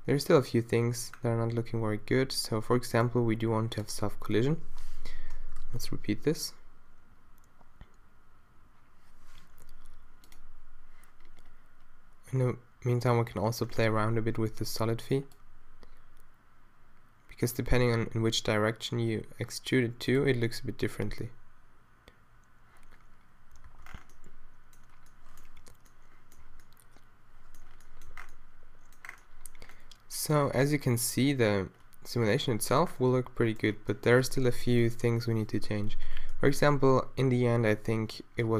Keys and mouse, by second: 1.7 middle click, 5.2 shift+Left, 5.6 alt+a, 17.5-21.3 middle drag, 23.8 alt+a, 25.6 z, 26.4 z, 28.1 a, 30.6 alt+a, 32.4 alt+a.